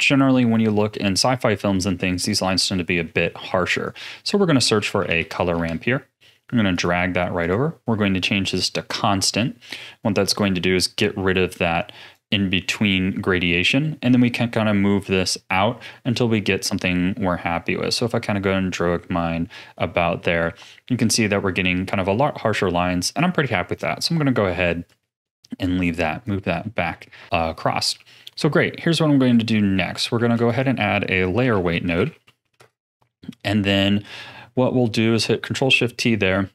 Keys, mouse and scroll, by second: 2.5 middle click, 3.4 shift+a, 7.4-13.3 drag, 13.6-16.7 drag, 19.1-21.1 scroll down 17, 22.3-23.1 scroll up 4, 23.1 click, 24.0-24.4 middle drag, 24.4-24.8 scroll down 2, 24.8 click, 25.6 click, 26.6-27.2 middle drag, 27.2 scroll up 2, 27.3 middle click, 27.9 ctrl+s, 28.5-29.1 scroll up 4, 29.4-30.1 middle drag, 30.1 shift+a, 34.4-34.8 scroll down 5, 34.8-35.4 middle drag, 35.4 ctrl+shift+click, 36.0 middle click, 36.4-36.5 scroll down 1.